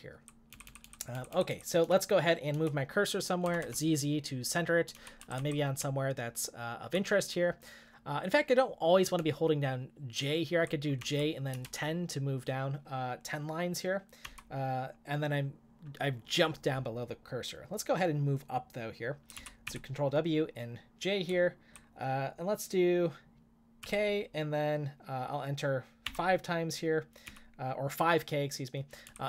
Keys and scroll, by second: 1.6-3.6 typing, 4.9-6.5 typing, 9.2-9.7 typing, 19.4 ctrl+w, 19.6 k, 21.3 typing, 23.8 typing, 26.1 5, 27.2 k, 28.8-29.2 typing.